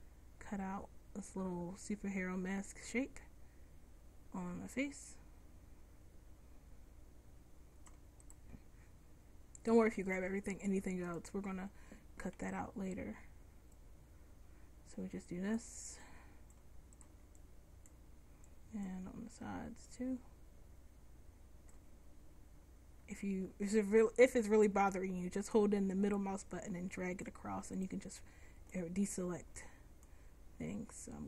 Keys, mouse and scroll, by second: 10.6-12.5 middle drag, 12.5 c, 19.1 c, 28.9 c.